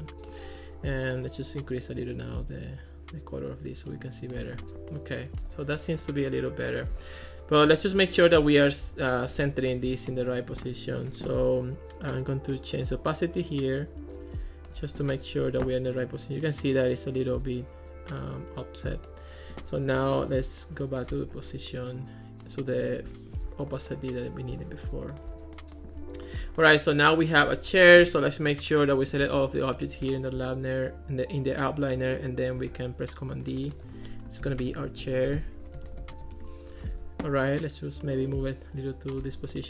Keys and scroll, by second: 32.6 super+g, 34.3-36.8 typing.